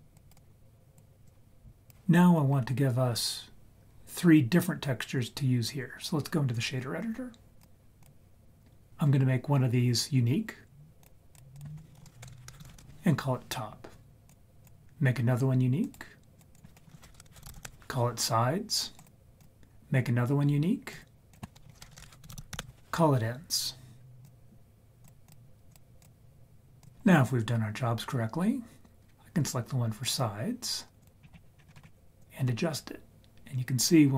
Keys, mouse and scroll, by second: 0.1 click, 0.5 click, 1.3 click, 7.6-8.1 drag, 11.0 click, 11.3-12.8 drag, 11.9 Right, 12.0 Right, 12.3 BackSpace, 12.3 BackSpace, 14.3 click, 15.8 click, 16.4 click, 16.9 Right, 17.1 BackSpace, 17.3 BackSpace, 19.0 click, 20.9 click, 21.3 click, 21.9 BackSpace, 22.4 BackSpace, 24.3-25.1 drag, 25.3 click, 26.0-26.8 drag, 28.9-30.1 scroll down 1, 30.1 click, 31.2-31.8 scroll down 5, 31.6-32.2 scroll up 7, 32.2-34.1 drag.